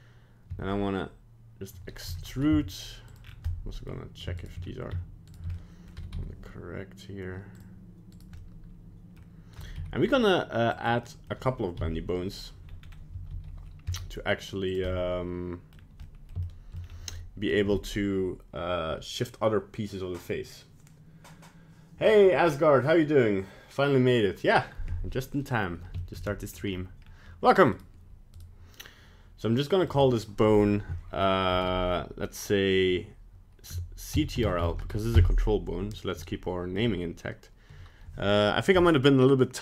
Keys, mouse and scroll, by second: 0.5 e, 3.2 scroll down 4, 3.4 middle click, 4.4 shift+right click, 4.6 scroll down 1, 5.2 shift+right click, 5.5 middle click, 5.9 g, 8.1 right click, 8.4 middle click, 9.5 g, 11.1 middle click, 11.2 middle click, 11.7 KP_1, 12.6-13.1 scroll up 3, 13.1 e, 14.8 middle click, 15.7 scroll down 1, 16.0 middle click, 16.4 shift+middle click, 16.8 scroll down 2, 17.1 middle click, 25.4 middle click, 26.0 shift+middle click, 26.2 middle click, 26.7-27.0 scroll up 2, 27.0 scroll down 1, 27.7 right click, 28.3 right click, 29.8 click.